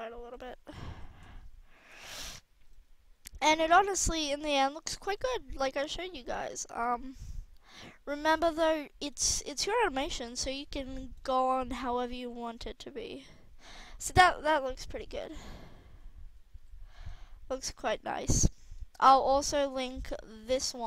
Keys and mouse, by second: 0.3 drag, 0.9 a, 1.1 a, 1.7 i, 5.2 right click, 7.6-8.5 right drag, 9.3 a, 9.5 a, 10.1 i, 12.1 alt+a, 13.6 alt+a, 15.0 alt+a, 16.4 alt+a.